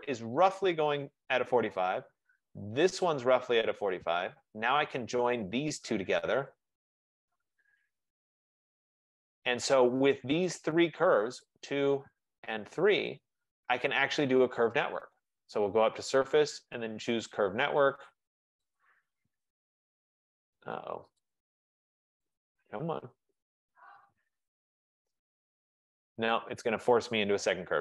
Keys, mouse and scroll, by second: 3.2 click, 5.5 click, 6.7 shift+click, 7.6-8.2 typing, 9.4 click, 10.5 click, 10.9 F15, 11.6 shift+click, 13.2 shift+click, 15.9 click, 18.9 click, 21.4 click, 22.4 click, 23.6 click, 24.6 Return, 27.6 Escape.